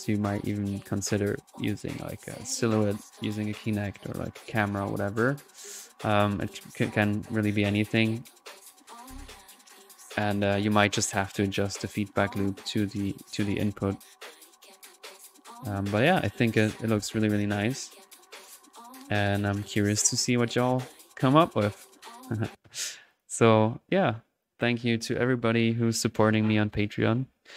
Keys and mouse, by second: 6.8-7.8 drag, 8.3 middle click, 8.7-16.1 drag, 16.1-16.6 middle drag, 18.8 click, 20.0 click, 21.3 drag, 22.3 click, 23.1 click, 23.8-24.3 middle drag, 24.4-24.8 drag.